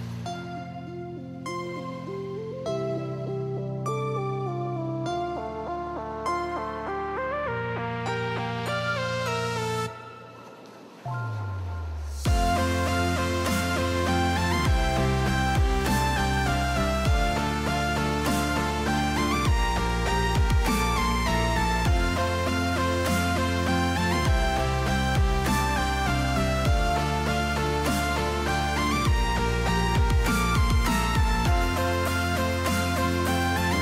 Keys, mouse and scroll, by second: 0.4 middle click, 1.0 shift+middle click, 2.1 Tab, 2.9 middle click, 3.5 shift+middle click, 4.1 s, 6.0 middle click, 6.8 shift+click, 7.5 shift+r, 8.4 middle click, 9.1 middle click, 10.1 shift+middle click, 10.7 shift+middle click, 11.8 shift+middle click, 12.8 shift+r, 13.3 right click, 13.8 shift+click, 14.0 r, 16.2 r, 16.9 right click, 18.5 s, 21.4 Tab, 21.8 middle click, 22.9 Tab, 24.2 middle click, 25.8 s, 27.7 middle click, 28.5 middle click, 29.8 shift+middle click, 30.1 Tab, 30.8 click, 31.5 shift+middle click, 32.1 g.